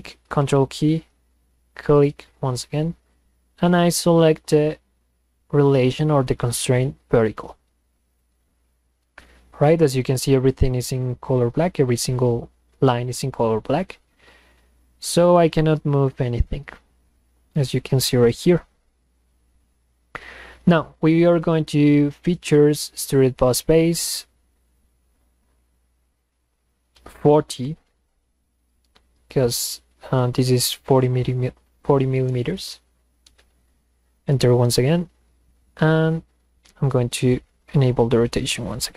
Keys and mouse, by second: 1.8 ctrl+click, 7.2 click, 8.2 click, 14.9-17.5 drag, 18.1 click, 22.0 click, 23.1 click, 28.7 Return, 32.6 Return.